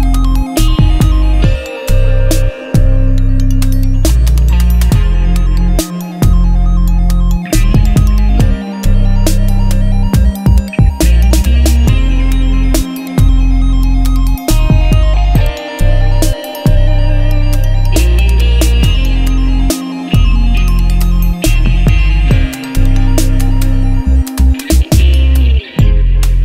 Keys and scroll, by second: 3.3 Tab, 5.5 ctrl+Tab, 7.3 u, 14.9 3, 15.0 Return, 25.8 Return.